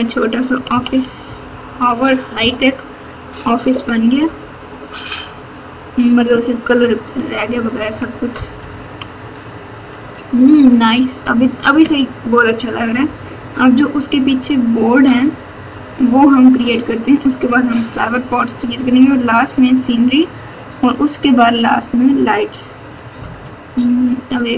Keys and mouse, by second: 0.0-2.3 typing, 7.0 click, 8.5 KP_6, 8.8 KP_6.